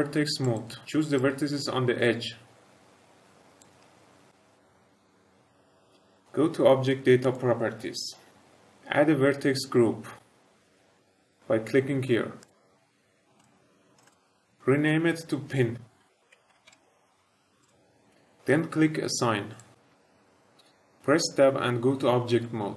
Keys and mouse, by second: 0.4 click, 1.1-3.5 drag, 7.1 click, 12.3 click, 13.3 click, 13.9 click, 14.0-17.7 drag, 19.4 click, 22.2 Tab.